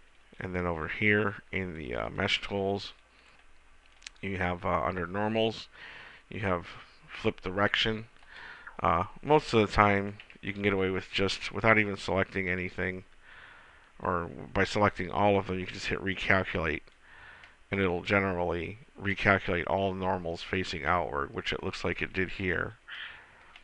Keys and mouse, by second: 2.0-3.7 drag, 8.6-11.7 drag, 10.4 a, 11.7 a, 16.0-17.9 drag, 17.9-21.3 middle drag, 22.7-23.6 middle drag.